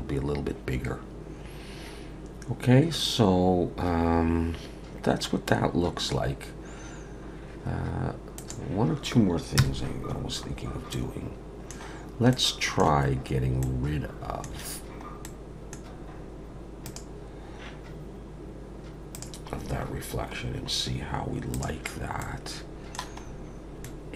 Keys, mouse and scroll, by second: 8.4 click, 9.6 KP_0, 10.4-10.9 scroll up 2, 10.9 middle click, 12.0-12.3 scroll down 1, 12.3 middle click, 13.6 middle click, 15.2 middle click, 15.8-16.9 scroll down 2, 16.9 click, 19.1 click, 19.5-19.8 scroll down 5, 20.4-21.0 scroll down 4, 21.5 click, 22.2 middle click, 23.2 scroll up 3, 23.8 middle click.